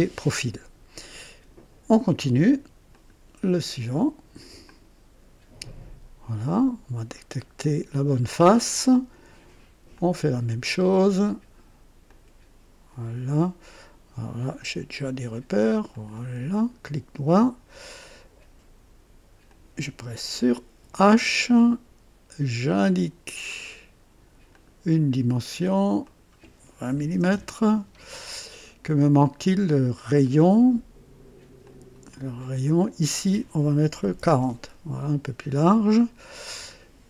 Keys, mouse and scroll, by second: 2.9 click, 4.6 click, 6.3 click, 7.1 scroll up 1, 7.6-8.3 right drag, 9.9 click, 12.0 click, 14.5 click, 15.9 click, 16.5 right click, 17.9 click, 19.4 click, 20.8 typing, 22.8 click, 24.5 click, 26.0 click, 26.9 KP_2, 27.1 KP_0, 27.3 KP_Enter, 28.7 scroll up 1, 29.2 right click, 30.2 right click, 31.6 click, 32.8 click, 33.9 KP_4, 34.1 KP_0, 34.4 Return, 36.5-36.8 scroll up 1, 36.5 typing.